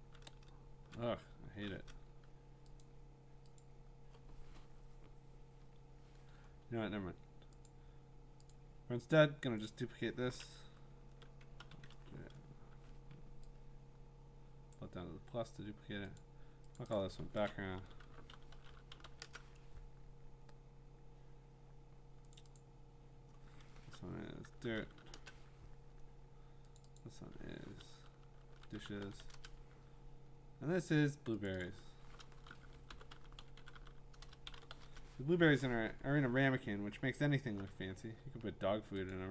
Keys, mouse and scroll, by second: 1.3 scroll, 1.4-1.8 scroll down 11, 2.8 click, 3.6 click, 7.6 click, 8.5 click, 9.1 click, 9.7 click, 11.6 ctrl+k, 13.1 Escape, 14.7 click, 16.2 click, 16.8 click, 16.9 click, 17.2-19.5 typing, 22.4 click, 22.6 click, 24.2-25.5 typing, 26.8 click, 27.0 click, 28.3-29.7 typing, 31.5 click, 31.6 click, 31.8-35.0 typing, 36.1-37.0 scroll, 36.6-37.3 typing, 37.9-38.8 scroll, 39.1 click.